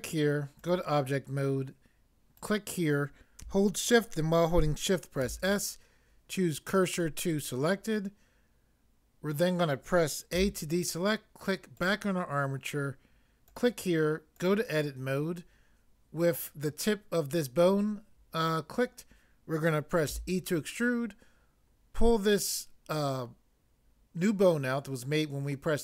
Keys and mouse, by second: 5.2 s, 10.4 a, 20.1 e.